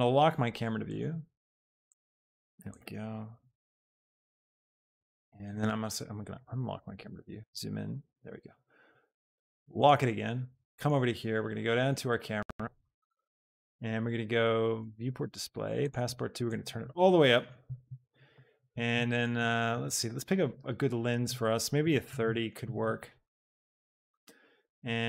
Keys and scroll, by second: 21.8 KP_3, 22.2 Return.